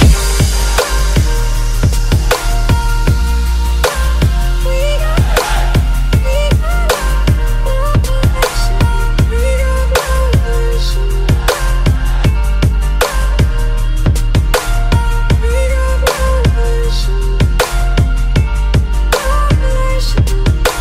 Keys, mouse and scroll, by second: 0.0-3.4 typing, 3.5 Tab, 4.5 click, 7.5 click, 8.2 click, 9.3 click, 9.5-10.5 typing, 11.7 click, 12.5 click, 12.8-14.3 typing, 14.8 click, 16.4 click, 17.1 click, 18.1 click, 18.4 alt+Tab, 19.9 alt+Tab.